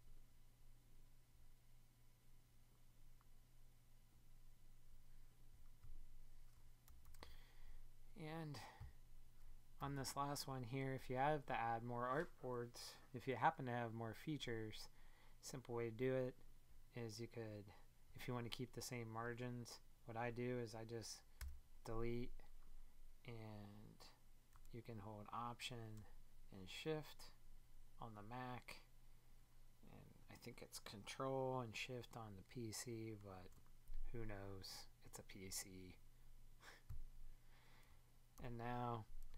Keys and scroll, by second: 21.4 BackSpace.